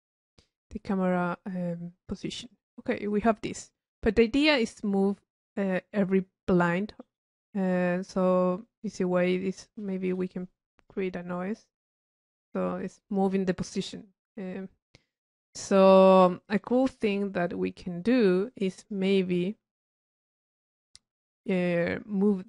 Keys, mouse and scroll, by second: 0.3 click, 0.9 middle click, 1.3 click, 2.7-3.4 drag, 4.4-6.2 middle drag, 7.0-8.2 right drag, 8.2 click, 10.8 click, 16.5 click, 18.7 click, 19.8 click, 20.7 click.